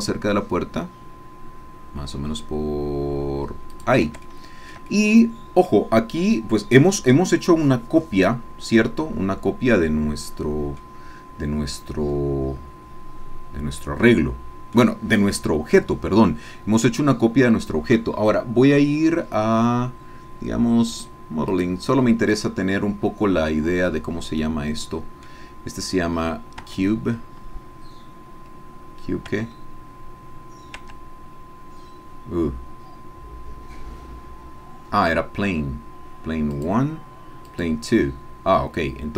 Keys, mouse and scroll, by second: 3.8 click, 4.3-5.8 shift+middle drag, 8.8-10.9 drag, 11.3-11.9 scroll up 2, 14.0 click, 23.8-24.4 scroll down 2, 24.4-26.6 drag, 27.3 Tab, 29.3 Tab, 31.6 Tab, 32.8-34.8 scroll down 2, 36.7 click, 37.5 click.